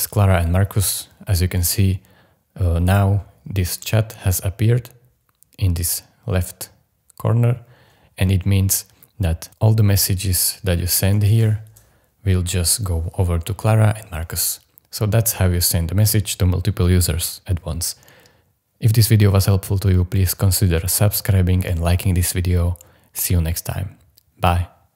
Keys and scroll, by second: 10.8-11.9 typing.